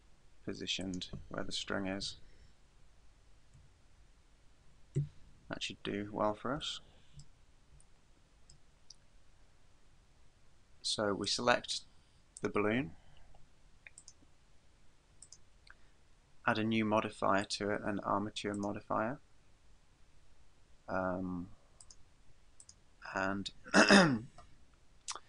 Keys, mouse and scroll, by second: 1.0 click, 2.1 KP_3, 3.6 KP_7, 5.0 KP_1, 5.7-6.5 scroll down 1, 6.5 scroll down 1, 6.8 shift+middle click, 7.2-7.7 scroll down 2, 8.0 shift+middle click, 11.3 right click, 14.0 click, 15.3 click, 17.5 click, 21.8 click.